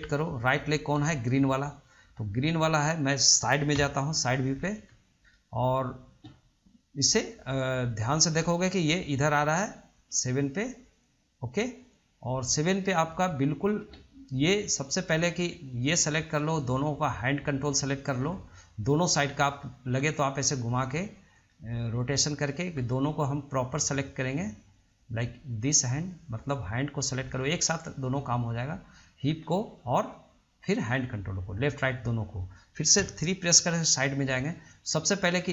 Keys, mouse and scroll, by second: 1.2-2.8 middle drag, 2.8 click, 4.0 KP_3, 4.7-5.5 scroll up 2, 5.5-8.2 shift+middle drag, 8.2-11.2 drag, 14.9 click, 17.6 shift+click, 18.8-20.7 middle drag, 20.7 shift+click, 21.7-23.6 middle drag, 23.6 shift+click, 24.1 shift+click, 25.1 drag, 26.0 click, 26.9 click, 28.9 shift+click, 29.6-31.2 middle drag, 31.2 shift+click, 31.7 scroll down 2, 32.0-33.2 middle drag, 33.2 KP_3, 34.7 click.